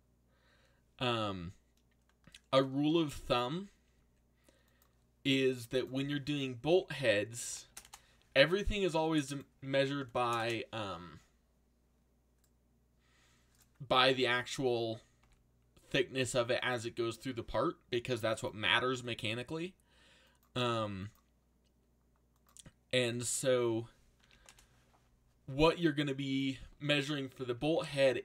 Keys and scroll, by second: 2.8 g, 6.4-7.7 typing, 9.9 3, 10.3 shift+', 10.4 Return, 14.0 z, 15.2 z, 24.2 5.